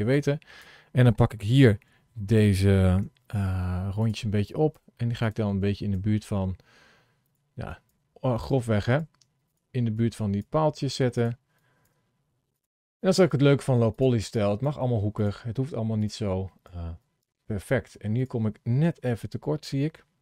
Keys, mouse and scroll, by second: 0.0 click, 2.9 g, 4.3 click, 4.7 g, 5.4 click, 5.9 g, 7.5 click, 7.9 g, 8.6 click, 8.9 g, 9.8 click, 10.3 g, 11.4 click, 11.8 g, 12.8 click, 13.3 g, 14.2 click, 14.6 g, 15.8 click, 16.6 click, 16.9 click, 17.2 g, 18.7 KP_Decimal, 19.3-20.2 scroll down 9.